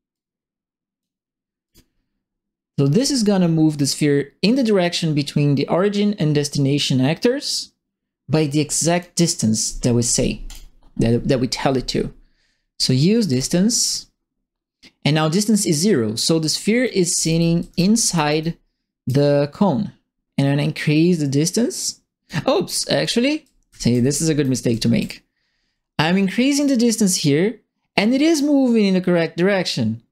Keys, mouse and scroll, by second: 0.1 click, 1.6 click, 2.9 click, 4.5 right click, 8.9 click, 10.4 click, 13.3 click, 16.8-19.0 right drag, 16.9-18.7 typing, 20.2-22.2 right drag, 22.7-25.0 right drag, 23.1-24.7 typing, 26.8-30.1 drag.